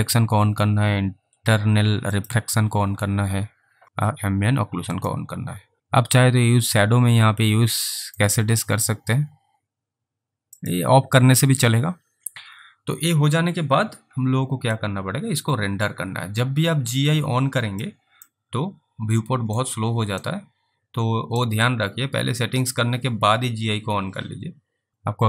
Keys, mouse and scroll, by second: 5.0 click, 8.2 click, 15.0 alt+click, 18.6 alt+middle click, 20.6 alt+right click, 21.9 alt+click.